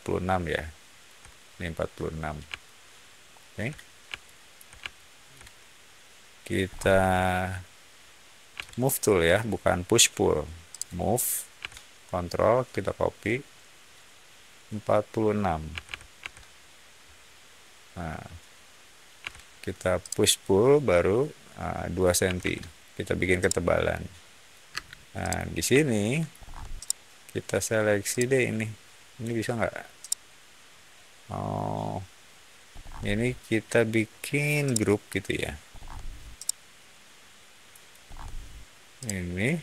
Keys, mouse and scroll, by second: 2.5 shift+middle click, 4.1-4.4 shift+middle drag, 4.8-5.2 shift+middle drag, 6.6 shift+middle click, 8.5 m, 10.6 click, 15.4-16.3 typing, 19.1 p, 19.9 click, 22.2 2, 22.3 Return, 23.3-24.4 middle drag, 24.6 space, 25.1 click, 25.7 shift+middle click, 26.3 scroll up 1, 26.7 shift+middle click, 28.0-29.1 shift+drag, 29.9-31.4 shift+middle drag, 32.6 scroll up 1, 34.6-35.2 shift+middle drag, 35.6 scroll up 1, 36.3-37.7 shift+middle drag, 38.0 scroll down 1, 38.9-39.6 shift+drag.